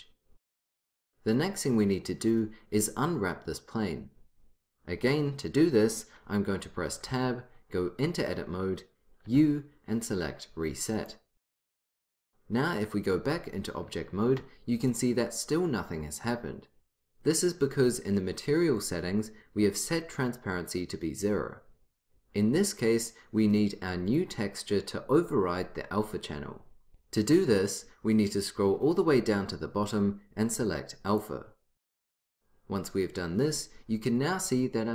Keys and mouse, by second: 7.2 Tab, 9.4 u, 13.4 Tab, 17.2-18.3 drag, 18.9-20.3 drag, 24.2-25.7 drag, 25.8 click, 26.9-31.2 middle drag, 31.2-32.7 drag.